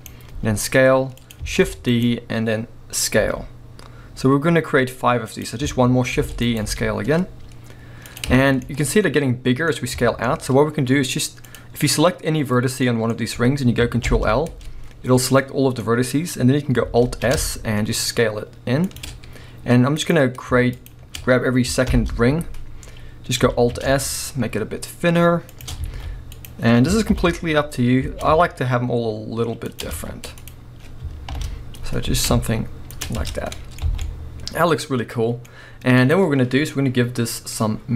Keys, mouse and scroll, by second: 0.0 right click, 0.3 s, 1.3 click, 1.6 shift+d, 2.1 right click, 3.2 s, 5.4 click, 6.1 shift+d, 6.6 right click, 6.7 s, 8.2 click, 8.4-10.5 shift+middle drag, 9.7-10.0 scroll up 1, 10.3 scroll up 1, 11.4 click, 12.6 scroll down 1, 12.8-19.0 middle drag, 14.1 ctrl+l, 17.0 alt+s, 19.0 shift+click, 19.1 scroll up 1, 20.0 click, 20.7 shift+click, 21.9 ctrl+l, 23.6 alt+s, 25.6 shift+click, 25.9 alt+a, 26.3 click, 27.1 ctrl+l, 28.1 alt+s, 29.8 shift+click, 29.9 alt+a, 30.4 click, 31.3 ctrl+l, 32.1 alt+s, 33.0 shift+click, 33.2 Tab, 33.2-33.6 scroll down 1, 33.6-36.0 middle drag, 33.8 alt+a, 35.6-35.9 scroll up 1, 36.0 click, 37.3-37.9 middle drag, 37.6 scroll up 1.